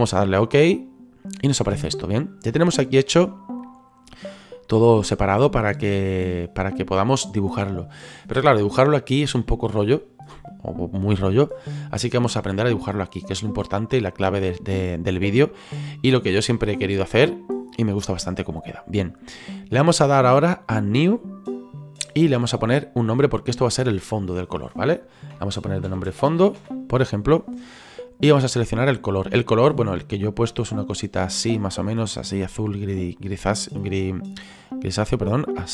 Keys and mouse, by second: 0.8 click, 21.1 click, 22.8 click, 25.9-26.6 typing, 27.9 click, 29.5 click, 34.6 click.